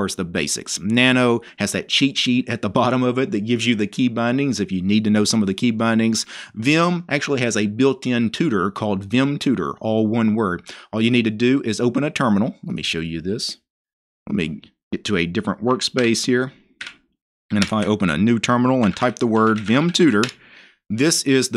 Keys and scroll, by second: 16.1-16.9 typing.